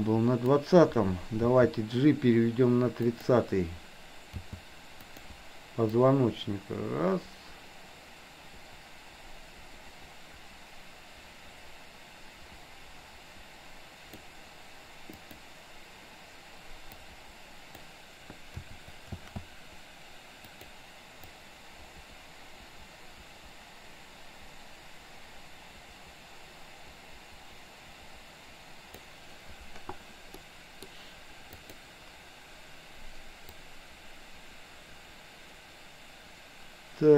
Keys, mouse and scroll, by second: 0.0-0.6 drag, 1.3 g, 4.5 g, 6.1-14.2 drag, 15.2 click, 17.0-17.8 drag, 19.2 shift+d, 21.3-29.1 drag, 30.5 middle click, 31.6 click, 33.6-37.1 drag.